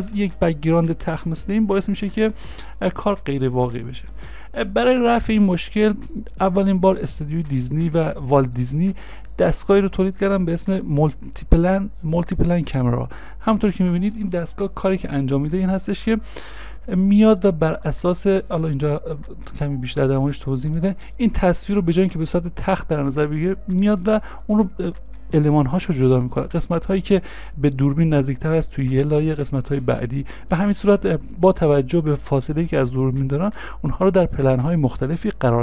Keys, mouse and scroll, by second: 2.5 space, 23.9 space.